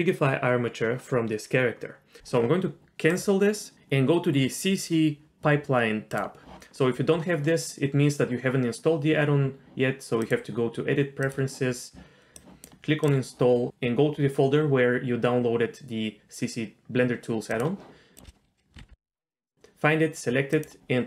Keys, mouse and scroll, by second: 6.1 click, 10.2-11.4 drag.